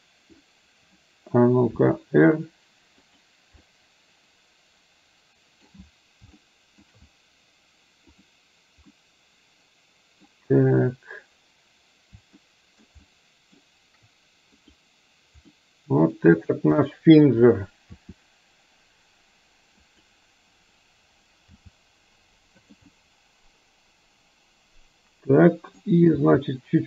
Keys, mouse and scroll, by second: 1.9 r, 3.7-5.7 middle drag, 6.5-6.9 shift+middle drag, 8.2 click, 9.1-10.4 middle drag, 12.6-13.0 shift+middle drag, 13.1-13.7 shift+middle drag, 15.6-16.2 middle drag, 17.0 middle click, 18.0 r, 21.6 g, 23.0-25.9 middle drag, 26.2 g.